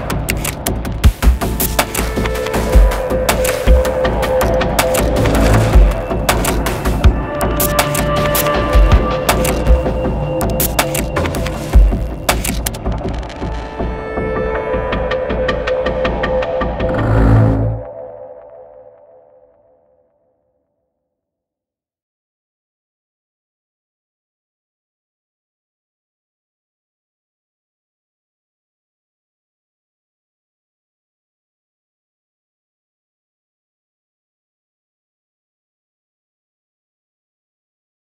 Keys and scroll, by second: 1.8-4.6 typing.